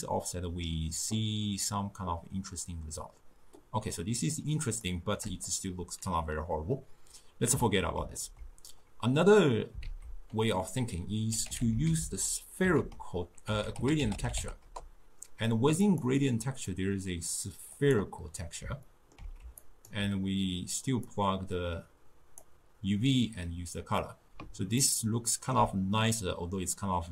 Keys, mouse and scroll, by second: 8.2 ctrl+x, 9.9 ctrl+a, 16.5-18.9 drag, 18.9-19.7 ctrl+middle drag, 19.7-21.1 alt+right drag, 21.1-24.2 drag, 24.8-27.1 ctrl+middle drag.